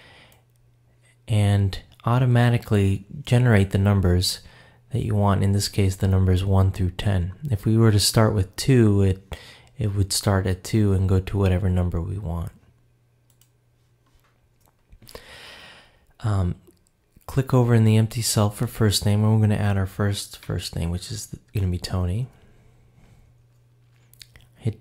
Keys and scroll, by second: 21.8 shift+t.